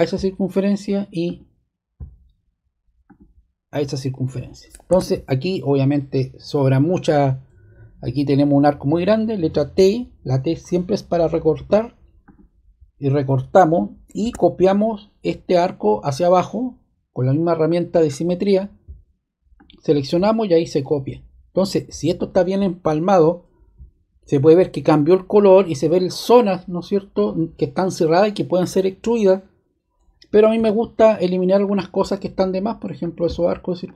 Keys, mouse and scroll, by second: 0.5 click, 1.2-2.5 drag, 3.0-4.2 drag, 4.9 ↺, 11.5 t, 12.2 click, 14.2 ⟲, 18.0-19.3 drag, 19.5-20.7 drag, 21.5-22.7 drag, 30.5 t, 31.6 click, 32.9 click, 33.8 click.